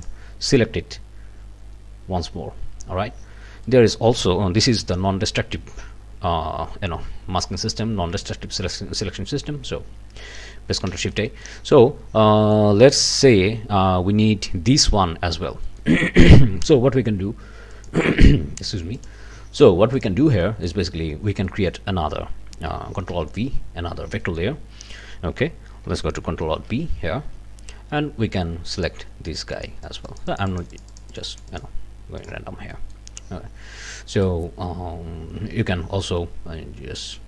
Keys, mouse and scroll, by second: 0.0 scroll up 2, 3.6-4.1 scroll up 2, 10.9 ctrl+shift+a, 11.3 ctrl+shift+scroll up 2, 11.5 ctrl+shift+click, 12.3 click, 15.7 click, 17.7 click, 19.0 click, 20.0 click, 20.4 click, 21.4 click, 23.1 ctrl+alt+v, 24.2 click, 24.9 click, 26.5 ctrl+alt+b, 28.7 click, 29.5-31.8 drag, 32.2 click, 32.7 click, 34.2-35.3 right drag, 35.6 Escape, 37.0 click.